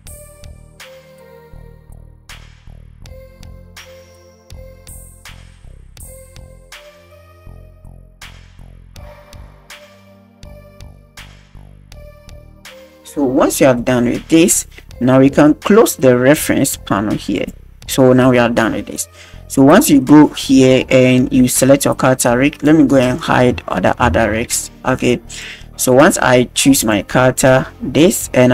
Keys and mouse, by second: 0.7 click, 0.8 a, 0.9 alt+g, 0.9 alt+r, 0.9 alt+s, 1.4 click, 1.8 click, 2.2 shift+click, 2.4 middle drag, 2.6 middle click, 3.0 click, 3.2 middle click, 3.7 click, 3.8 alt+g, 4.1 click, 4.7 middle click, 4.8 a, 4.9 i, 5.0 shift+click, 5.8 r, 6.2 click, 6.3 a, 6.3 alt+g, 6.4 alt+r, 6.4 alt+s, 8.0 shift+middle click, 8.2 click, 8.8 shift+right click, 9.3 shift+right click, 9.8 right click, 9.9 click, 10.2 click, 10.5 click, 10.7 a, 10.8 i, 10.9 click, 11.2 shift+click, 11.9 click, 12.0 a, 12.1 alt+g, 12.2 alt+r, 12.2 alt+s, 12.5 click, 13.8-14.4 middle drag, 17.3 click, 18.9-20.0 middle drag, 22.6-23.0 drag, 24.0 alt+h, 25.0-25.4 drag, 26.0 click, 26.8 click, 27.9 click.